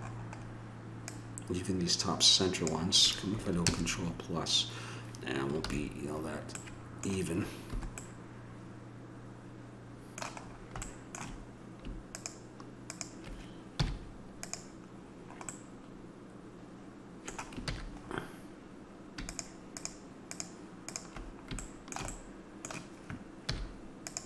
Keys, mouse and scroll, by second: 7.7-9.9 middle drag, 10.0 middle click, 12.1 right click, 13.1-14.9 drag, 13.8 x, 14.9-16.8 middle drag, 17.7 ctrl+z, 19.3-20.8 drag, 21.6-23.4 middle drag, 23.5 x.